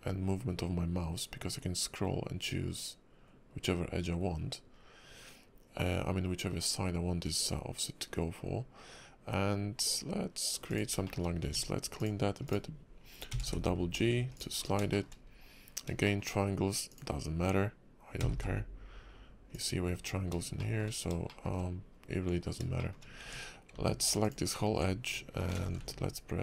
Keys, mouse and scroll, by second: 11.1 shift+middle click, 11.3 scroll up 2, 11.4 Tab, 12.0 click, 12.4 click, 13.3 g, 14.6 scroll down 3, 14.9 shift+middle click, 15.1 scroll up 2, 16.0 shift+middle click, 16.9 click, 18.2 g, 20.2-20.6 scroll down 3, 20.6 shift+middle click, 21.3 shift+middle click, 21.8 scroll up 2, 22.8 shift+middle click, 23.2 Tab, 24.2 alt+click, 25.5 ctrl+b.